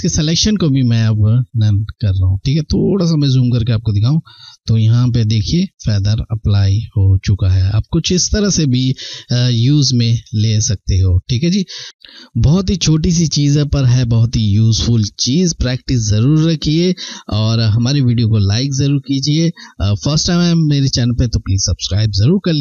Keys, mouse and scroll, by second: 0.2 click, 2.6-3.1 ctrl+scroll up 1, 3.5 ctrl+scroll down 1, 4.6 ctrl+scroll up 1, 5.6-6.3 scroll, 6.3 ctrl+scroll down 1.